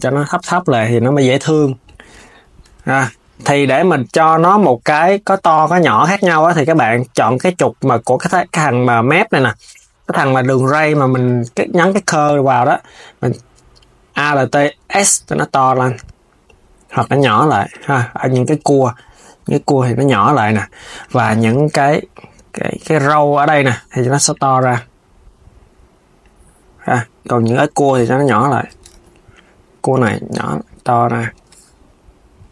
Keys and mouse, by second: 0.2 KP_3, 0.5 click, 0.9 s, 1.5 click, 1.9 Tab, 2.4 Tab, 2.6 click, 5.5 Tab, 6.0 click, 12.4 s, 14.4 alt+s, 17.5 alt+s, 18.2 click, 18.6 alt+s, 19.8 alt+s, 20.7 click, 21.3 alt+s, 23.2 alt+s, 24.0 click, 24.3 alt+s, 26.0 alt+s, 27.1 click, 27.7 alt+s, 28.3 alt+s, 28.6 z, 29.1 click, 29.6 alt+s, 31.0 alt+s.